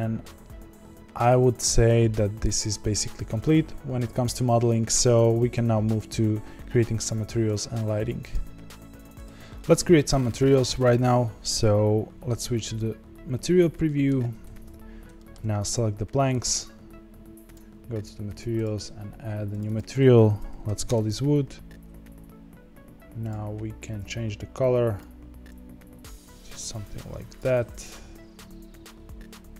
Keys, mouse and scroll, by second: 13.3 z, 13.8 middle click, 14.7-15.1 scroll up 4, 15.1 shift+middle click, 15.7 click, 18.8 click, 19.4 click, 19.6 click, 23.2 click.